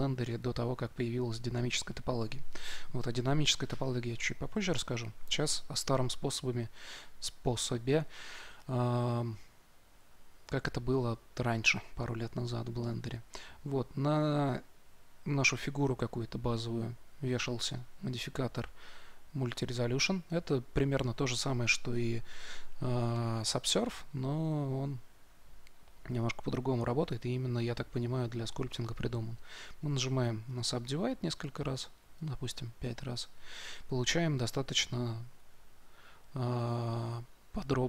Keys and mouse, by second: 11.6-19.4 drag, 28.6-34.3 drag, 34.3 Tab, 35.4 Tab.